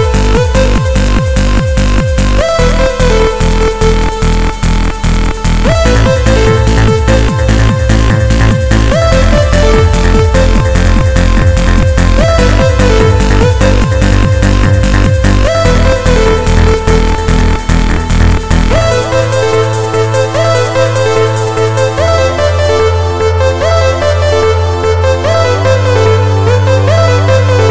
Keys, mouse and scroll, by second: 0.3 middle click, 2.2 s, 4.0 click, 5.7 KP_1, 7.4 click, 10.8 middle click, 12.6 click, 22.8 s, 23.6 click, 25.0 click, 27.2 s.